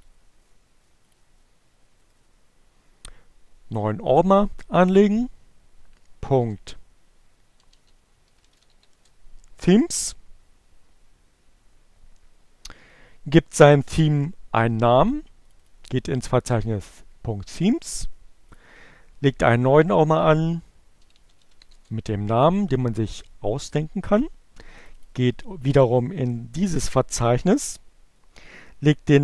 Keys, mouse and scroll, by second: 0.4-2.0 drag, 2.1 middle click, 2.1-2.4 scroll down 2, 2.7 right click, 4.0-5.6 drag, 6.6-8.9 typing, 8.9 Return, 14.6 click, 14.9 middle click, 15.4 click, 16.1 right click, 16.9 click, 17.6 j, 19.0-20.1 typing, 22.0 click.